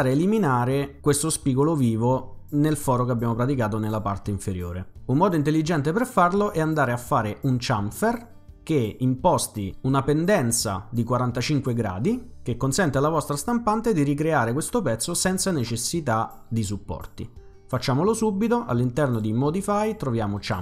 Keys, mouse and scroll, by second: 3.1 middle click, 3.1-3.6 scroll down 1, 19.0 click, 20.4 click.